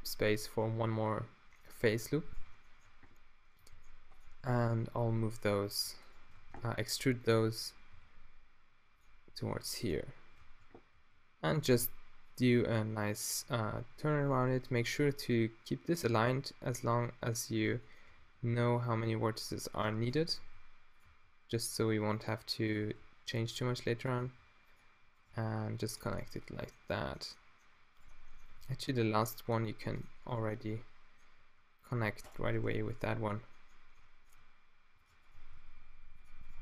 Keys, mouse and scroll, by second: 1.6 middle click, 2.2 middle click, 2.8 middle click, 3.7 g, 4.2 click, 5.7 e, 6.4 shift+space, 7.9 g, 10.5 shift+space, 11.0 e, 11.7 e, 12.4 e, 17.9 click, 18.0 middle click, 18.2 e, 19.9 g, 20.4 e, 21.1 e, 22.7-24.4 drag, 22.9 e, 23.6 e, 24.2 e, 25.3 g, 26.1 click, 26.4-27.9 middle drag, 28.6 x, 29.6 middle click, 30.8 middle click, 31.0 click, 32.3 right click, 32.7 f, 35.0 g, 35.1 right click, 35.3 g.